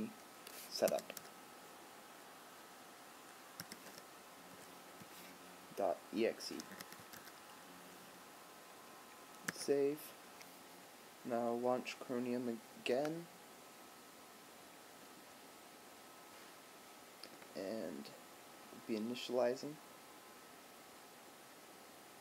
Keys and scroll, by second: 9.6 super+s.